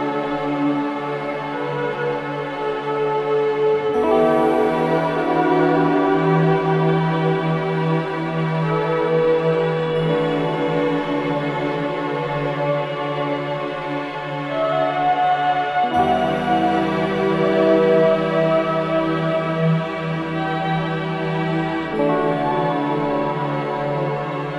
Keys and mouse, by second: 0.0-0.6 ctrl+alt+drag, 0.4-1.2 typing, 2.1 click, 3.7-6.3 drag, 5.8-7.0 typing, 9.0 click, 10.3-12.5 drag, 10.5-11.2 typing, 12.8-16.9 typing, 19.0 click, 20.3-21.6 drag, 22.4-22.7 typing, 23.9 click.